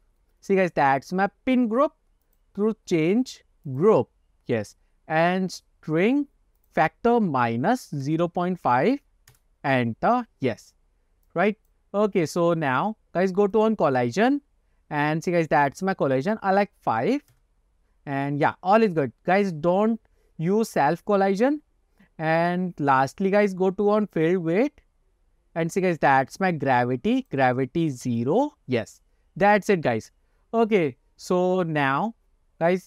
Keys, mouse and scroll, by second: 0.0-1.0 scroll down 2, 2.6-4.2 drag, 4.5-5.0 scroll down 3, 6.7-9.7 drag, 11.4 click, 12.6-13.0 scroll down 3, 13.6 click, 14.1-14.7 scroll down 5, 14.7-15.0 scroll up 1, 16.4-17.7 drag, 22.5 click, 23.3-24.0 scroll down 3, 24.2 click, 24.8-25.5 scroll down 4, 27.3-28.5 drag, 30.0-30.4 scroll down 3, 30.5 scroll up 1.